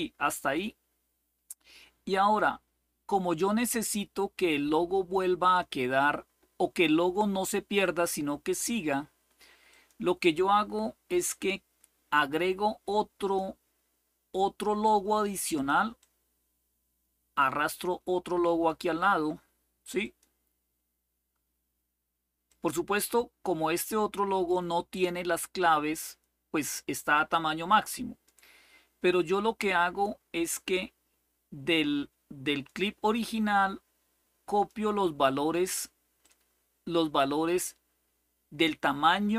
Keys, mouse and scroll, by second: 0.0 click, 5.3 click, 7.5 click, 9.4 click, 12.9 click, 15.2 click, 15.7-18.4 drag, 19.7 click, 22.2 click, 23.5-28.0 drag, 32.2 click, 34.2 click, 35.9-36.9 drag.